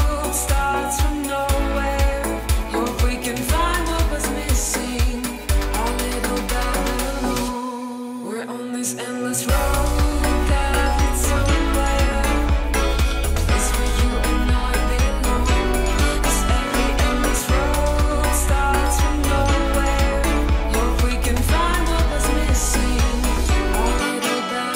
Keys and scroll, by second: 0.8 super+d, 1.5 space, 4.7 space, 7.0 space, 7.6 space, 12.6 super+d, 14.7 super+d, 15.0 super+d, 17.2 super+d, 17.7 space, 19.3 space, 22.2 super+d, 23.3 space.